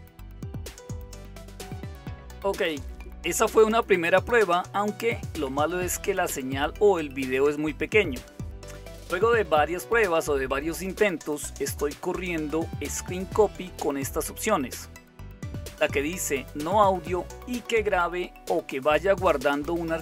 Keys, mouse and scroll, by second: 8.9 Return, 8.9 typing, 9.2 Return, 10.8-12.4 right drag, 12.4 click, 16.3 Right, 17.9 Left, 18.5 Left, 18.6 Left, 18.6 Left, 19.3 Left, 19.5 Left.